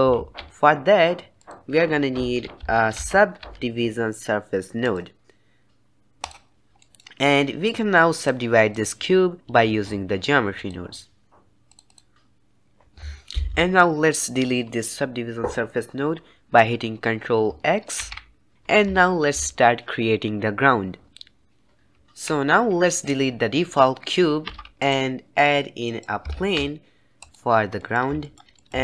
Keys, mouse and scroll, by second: 7.2-8.6 middle drag, 8.6-18.3 drag, 18.3 ctrl+x, 24.4 x, 25.8 middle click, 26.2 shift+a, 27.7-28.8 middle drag.